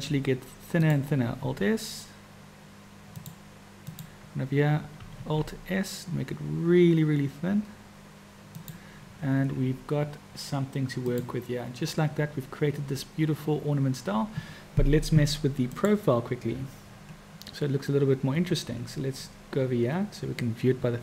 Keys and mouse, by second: 1.4 alt+s, 3.9 click, 5.2 alt+s, 11.1 click, 15.7 click.